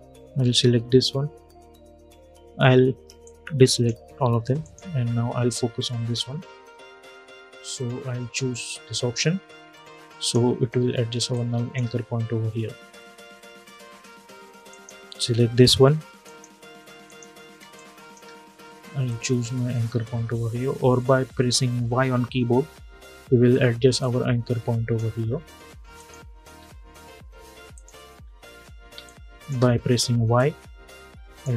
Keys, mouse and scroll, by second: 2.9-4.3 drag, 5.6-6.2 alt+scroll up 1, 9.9 click, 10.9 space, 11.1 click, 11.4 space, 14.4 click, 17.3 space, 17.5 click, 17.8 space, 18.8 click, 21.6 y, 23.7-25.7 drag, 26.2-27.4 scroll down 1, 27.4 click, 27.9 scroll up 1, 28.6 space, 28.7 click, 29.1 space, 30.1-31.5 drag.